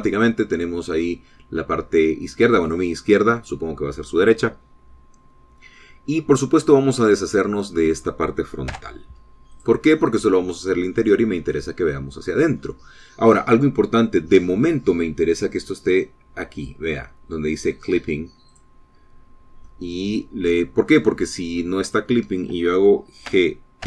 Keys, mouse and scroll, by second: 6.7 click, 8.0 click, 9.6 x, 10.5 click, 11.6-13.3 middle drag, 13.5-14.0 scroll up 4, 19.4 click, 20.6-22.3 drag, 22.7 click, 23.1-23.8 middle drag.